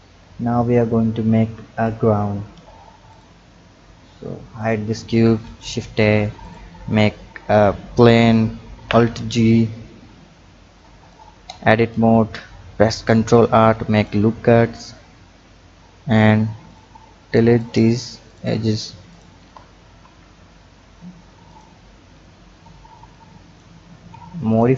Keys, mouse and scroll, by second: 0.2 click, 2.4-2.9 scroll down 3, 3.1 click, 4.6 click, 5.3 shift+a, 8.6 alt+g, 9.5-10.7 scroll up 4, 10.7 click, 11.5 Tab, 12.9 ctrl+r, 16.7 click, 17.5 click, 18.2 click, 19.1 shift+click, 20.0 Delete, 22.1 Tab, 23.1 click, 24.5 drag.